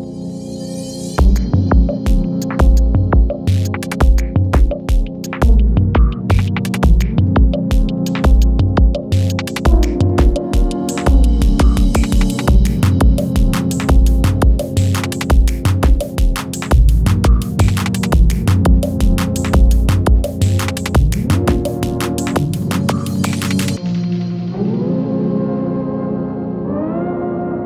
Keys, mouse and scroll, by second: 0.8 click, 5.6-8.6 drag, 8.6 ctrl+x, 10.0 click, 11.6 ctrl+shift+v, 14.2-17.7 drag, 17.7 ctrl+x, 18.7 click, 19.9 ctrl+shift+v, 20.8-24.4 drag, 24.4 ctrl+x, 25.6 click, 26.1 ctrl+shift+v, 26.9 click.